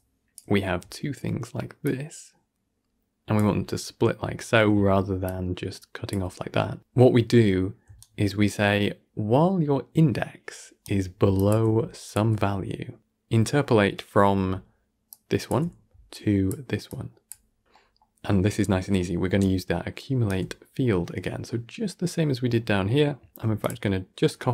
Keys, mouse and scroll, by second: 0.2 d, 0.7-1.7 d, 1.7-3.2 drag, 3.2 d, 3.9-4.2 scroll up 2, 4.2 shift+middle click, 4.6 d, 5.1 click, 6.0 d, 7.7 d, 7.9-10.7 right drag, 10.7 d, 11.2-11.7 drag, 11.7 d, 11.9 click, 12.2 d, 14.3 d, 14.7 d, 15.0 click, 15.4-15.8 d, 16.0 click, 16.4 d, 16.8-17.6 drag, 17.6-19.2 middle drag, 19.2 d, 19.3 right click, 20.2 d, 20.3 d, 20.6-21.0 scroll down 10, 21.0-23.5 middle drag, 23.5 click, 23.9-24.5 scroll up 3.